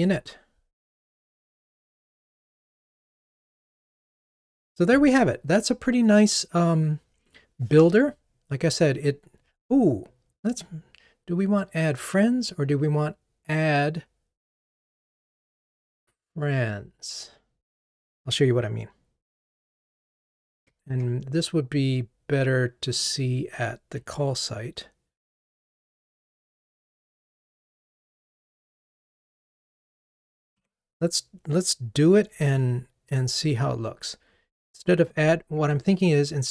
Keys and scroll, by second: 0.7 super+BackSpace, 1.6 ctrl+r, 20.9 ctrl+Tab, 28.8 shift+F6, 30.3 Escape, 32.5 super+F6.